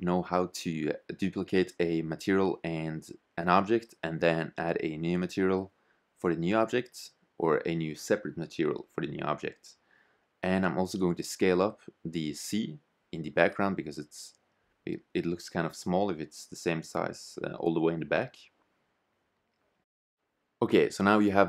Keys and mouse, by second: 0.1 BackSpace, 0.4 shift+b, 1.9-4.1 drag, 4.9 click, 7.2 Tab, 7.6 shift+d, 9.6 s, 10.2 Tab, 10.4 BackSpace, 10.6 shift+c, 11.2 Tab, 12.1 click, 13.7 s, 20.6 click.